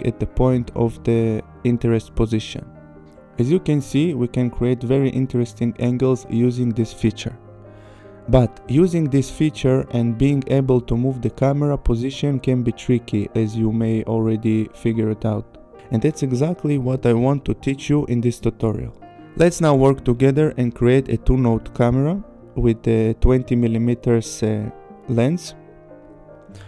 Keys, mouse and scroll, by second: 4.2 click, 4.4 click, 11.3 click, 22.9 click, 26.1 right click.